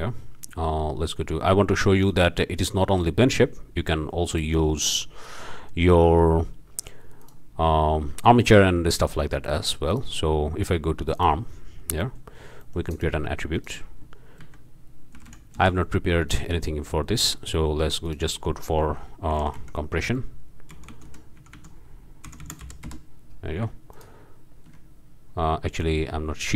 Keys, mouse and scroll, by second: 2.1-2.4 drag, 4.3 click, 5.7 scroll up 1, 7.2 click, 9.9-10.2 drag, 11.2-11.6 drag, 11.7 scroll up 1, 12.4 scroll up 1, 12.6-13.2 drag, 12.9 shift+middle drag, 13.2 shift+a, 13.5 shift+click, 14.4 a, 15.1 t, 15.6 Return, 16.3 click, 16.6-17.7 drag, 18.0 click, 19.3 c, 19.6 m, 20.7-22.6 typing, 22.9 Return, 23.9 ctrl+shift+click.